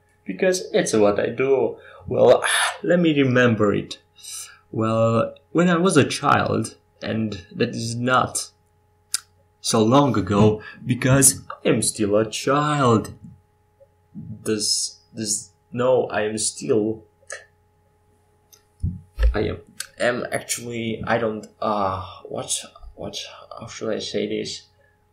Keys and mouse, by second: 6.6 click, 11.4-12.8 drag, 12.8 middle click, 14.0 KP_5, 14.5 KP_7.